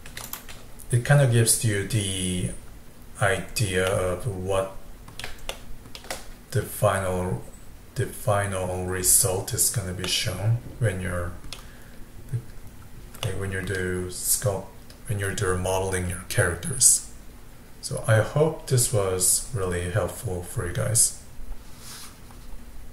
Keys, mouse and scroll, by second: 0.3 click, 3.9-8.7 middle drag, 10.1-11.8 middle drag, 11.8 scroll up 2, 12.8-13.3 scroll down 1, 13.3-16.4 middle drag.